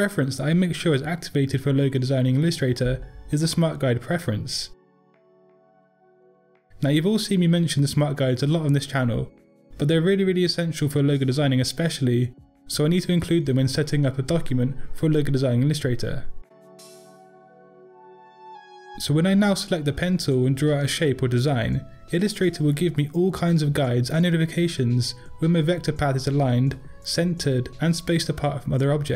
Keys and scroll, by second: 18.9 p.